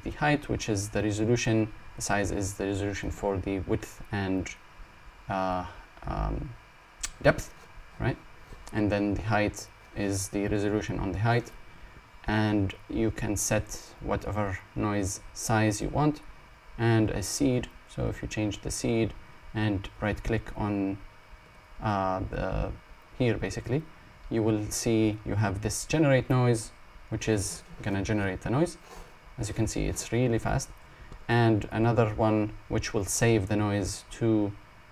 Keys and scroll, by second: 13.8 Num_Lock, 27.3 Num_Lock, 32.5 Num_Lock.